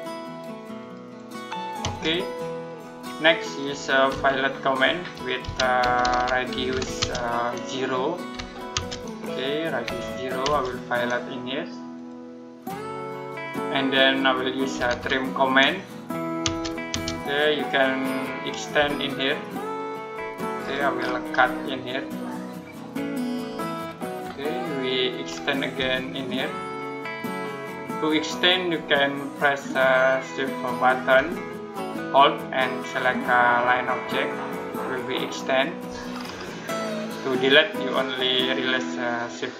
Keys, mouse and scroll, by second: 1.7 space, 2.2 middle click, 2.6-4.0 scroll up 1, 3.7-7.1 typing, 4.8 Escape, 8.2 r, 8.6 space, 9.7 0, 10.3 space, 11.8 click, 14.4-15.2 typing, 16.3 space, 19.6 click, 20.4-22.0 scroll up 1, 22.0 click, 23.2-23.9 scroll down 1, 24.3 middle click, 25.0-25.6 scroll up 1, 26.5 shift+click, 28.1 shift+click, 30.5 click, 33.5 shift+click, 35.3 shift+click, 35.9-38.3 scroll up 1.